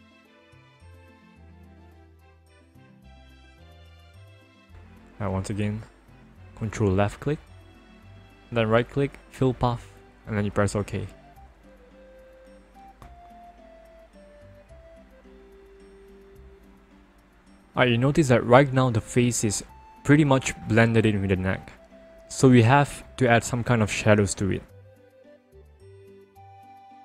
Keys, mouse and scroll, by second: 2.4 alt+click, 5.0 alt+click, 6.8 ctrl+click, 7.6 right click, 9.0 click, 10.6 click, 13.7 right click, 14.9 click, 16.2 ctrl+=, 17.0 ctrl+-, 18.6-20.2 scroll up 1.